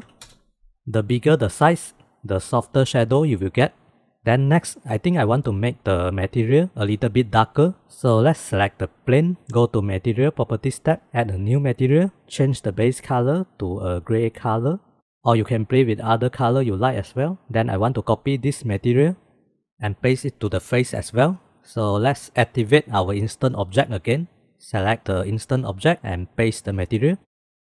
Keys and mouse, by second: 10.5 click, 11.6 click, 12.6 click, 13.6 middle click, 14.7 middle click, 18.7-19.5 drag, 22.3 drag, 24.0 click, 24.5 click, 24.9 click, 26.7-27.6 drag.